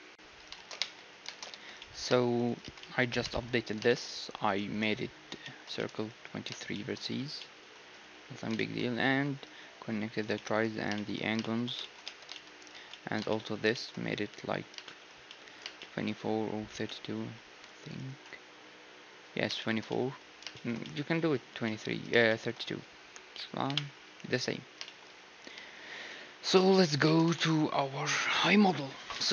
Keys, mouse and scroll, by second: 1.1-3.1 drag, 1.3 shift+space, 1.5 1, 1.8-3.6 middle drag, 2.4-6.3 right drag, 2.6 Tab, 3.9-21.1 middle drag, 7.2 z, 7.8 z, 12.0 Tab, 12.6-14.6 right drag, 12.7 Tab, 17.8-19.9 right drag, 21.4 Tab, 23.6-27.1 typing, 27.3 ctrl+s.